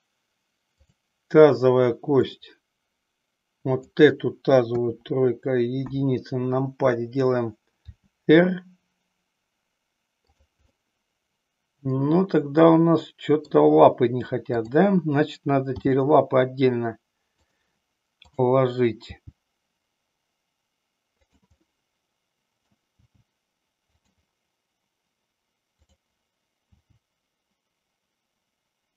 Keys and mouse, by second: 0.7-1.1 drag, 2.2-3.9 drag, 4.8 KP_3, 5.8 KP_1, 7.8 r, 10.4 click, 10.7-13.4 middle drag, 14.6 click, 15.8 g, 18.3 click, 19.3 g, 21.7-22.8 middle drag, 23.0 g, 25.8 click, 26.8 g.